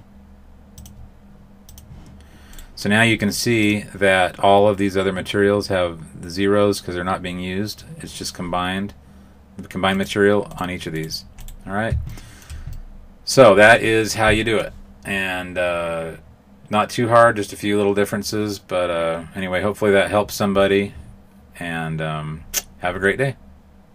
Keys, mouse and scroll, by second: 0.7 click, 2.5 right click, 3.6 click, 10.4 right click, 10.9 right click, 12.1 right click, 12.1 shift+middle click, 12.6 middle click.